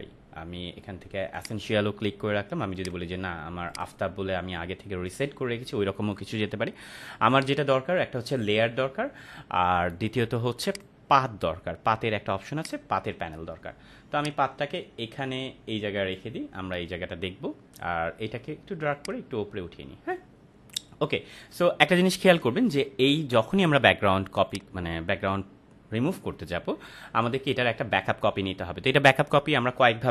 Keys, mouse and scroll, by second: 10.7-16.3 drag, 18.9-20.1 drag, 24.4 click.